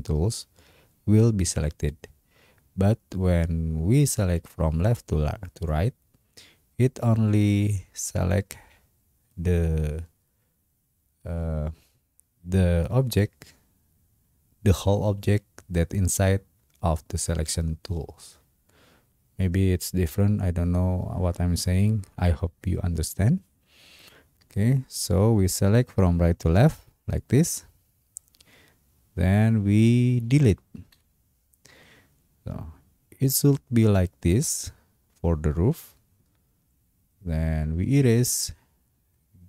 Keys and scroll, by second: 30.9 Delete.